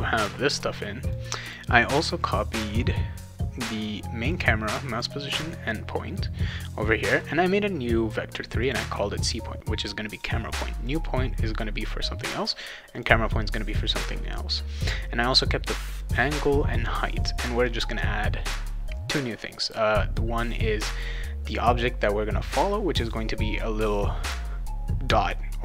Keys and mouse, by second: 0.6 click, 1.4 click, 4.3 click, 4.9 click, 5.3 click, 7.2 click, 8.6 click, 8.8 click, 10.1 click, 10.8 click, 12.9 click, 15.3 click, 15.9 click, 16.4 click, 19.6 click, 20.9 click.